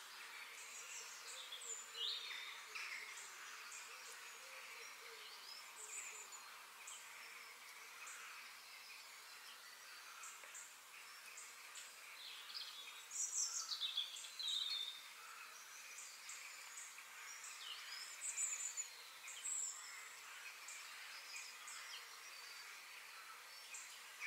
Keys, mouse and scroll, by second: 4.6-6.6 middle drag, 10.4-12.3 middle drag, 14.8 g.